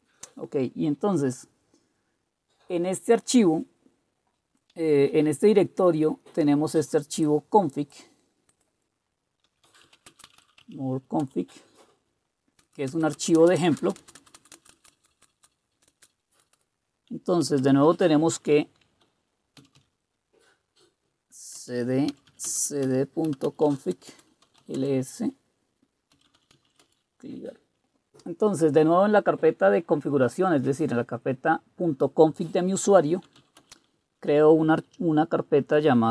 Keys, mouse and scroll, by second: 9.2-10.9 typing, 9.5 click, 11.2 Return, 12.6-16.1 typing, 19.3-20.1 typing, 21.5 Return, 22.1-27.2 typing, 33.2-33.9 typing.